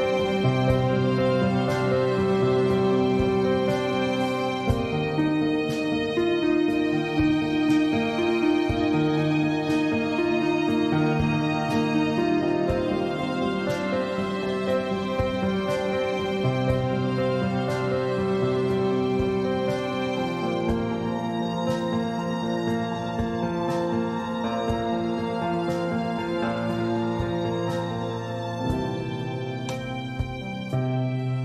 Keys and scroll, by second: 17.0 ctrl+z, 19.1 ctrl+shift+z, 20.5 ctrl+z, 21.4 ctrl+shift+z.